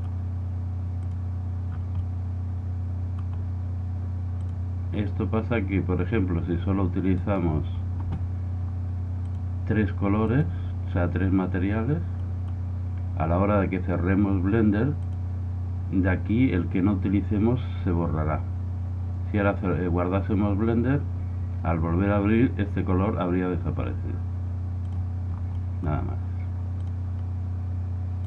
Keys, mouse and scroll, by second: 1.1-2.8 drag, 1.1-4.5 middle drag, 4.5-6.2 drag, 9.3-11.1 drag, 13.8 middle click, 15.0-16.9 drag, 26.7-27.7 middle drag.